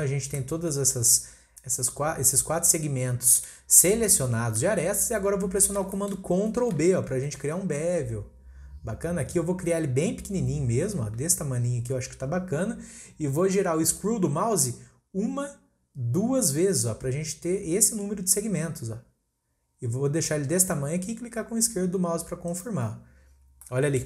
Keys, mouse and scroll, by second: 3.7-4.2 scroll up 1, 4.2-5.0 scroll up 2, 5.0-5.6 scroll up 1, 5.6-5.9 scroll down 1, 5.9-7.3 shift+middle drag, 7.3 ctrl+b, 23.4 scroll down 2, 23.6-24.0 middle drag.